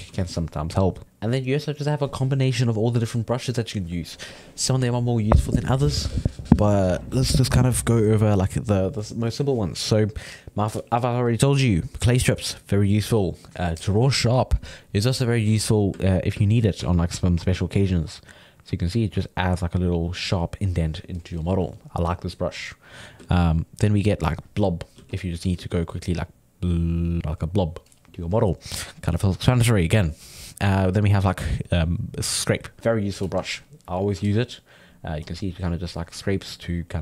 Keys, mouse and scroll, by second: 0.2 ctrl+z, 1.0-4.3 ctrl+middle drag, 14.8 click, 15.6-18.0 middle drag, 18.0-21.2 drag, 22.4-24.8 ctrl+drag, 24.8 middle click, 24.9 f, 25.4 ctrl+middle click, 26.1-27.2 drag, 27.2-30.4 middle drag, 31.1-34.9 drag, 35.2-36.4 drag, 36.4 middle click.